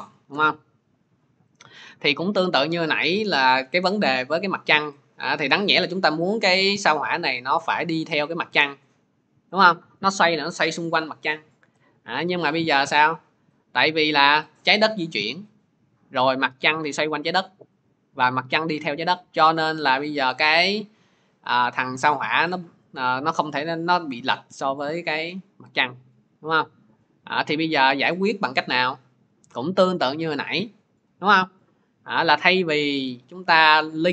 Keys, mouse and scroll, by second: 0.2 Return, 1.4 click, 14.0 click, 14.6 middle click, 28.0 click, 29.9 middle click.